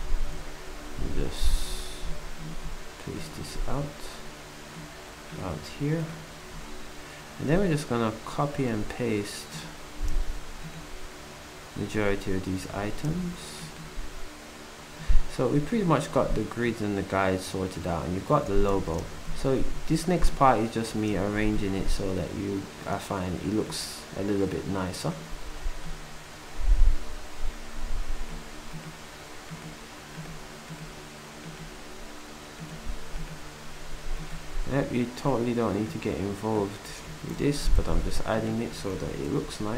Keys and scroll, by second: 38.7 ctrl+c, 39.5 Down.